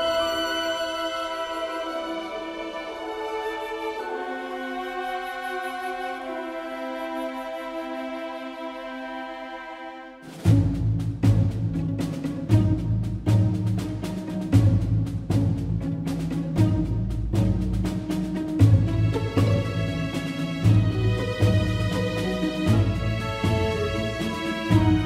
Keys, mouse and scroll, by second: 21.7 shift+z, 23.3 shift+z, 23.5 KP_0, 23.7 click, 24.1 shift+z.